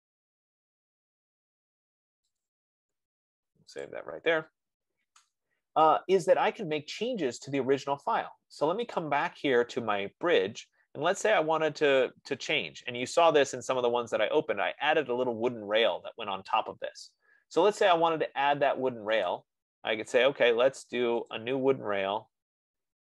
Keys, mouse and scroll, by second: 0.4 click, 2.9 click, 4.4 click, 9.4 click, 11.5-11.8 scroll, 11.9 middle click, 12.2 middle click, 14.0 right click, 17.8-19.2 right drag, 19.6 click, 21.8 click.